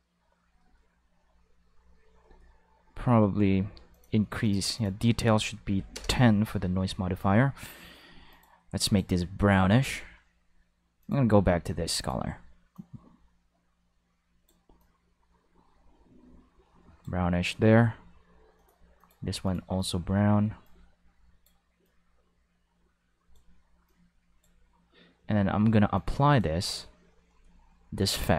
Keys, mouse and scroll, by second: 3.9 click, 4.4 click, 4.7 click, 5.2 5, 5.7 0, 5.7 5, 5.9 Return, 6.0 5, 8.3 click, 8.8 click, 11.0 click, 12.0 click, 12.7-17.3 drag, 18.6 click, 19.0 click, 19.4 click, 19.8 click, 20.6 click, 21.8-23.3 drag, 23.9 click, 25.9 click, 28.1 click.